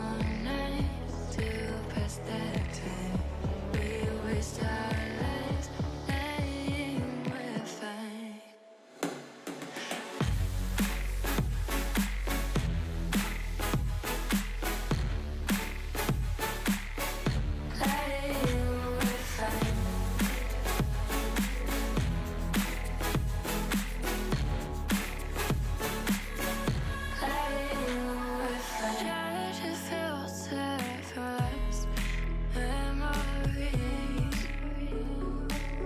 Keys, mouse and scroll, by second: 1.0 Tab, 1.4 Tab, 2.4 p, 2.8 Tab, 5.7 Tab, 6.8 g, 7.1 a, 7.4 g, 8.6 click, 9.0 click, 9.6 click, 10.1 ctrl+l, 10.6 g, 11.7 click, 11.9 shift+middle click, 12.1 scroll up 4, 12.3 shift+middle click, 12.7 g, 13.3 alt+z, 13.6 click, 14.2 x, 15.0-15.3 shift+middle drag, 15.3 click, 15.8 ctrl+l, 16.3 ctrl+l, 16.7 shift+middle drag, 17.0 s, 20.0 shift+middle click, 20.8 g, 24.2 1, 24.8 click, 25.4-25.9 shift+middle drag, 25.9 alt+z, 26.0 scroll down 2, 26.2-26.6 shift+middle drag, 26.6 g, 30.9 ctrl+l, 31.5 s, 33.7 ., 34.8 s.